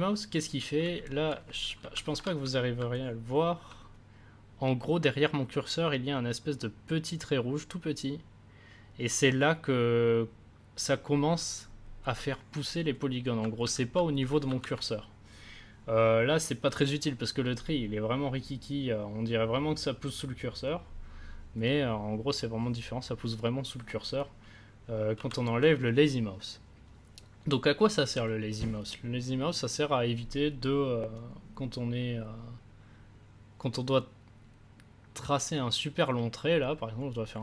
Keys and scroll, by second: 1.7 ctrl+z, 14.5 ctrl+z, 25.1 ctrl+z.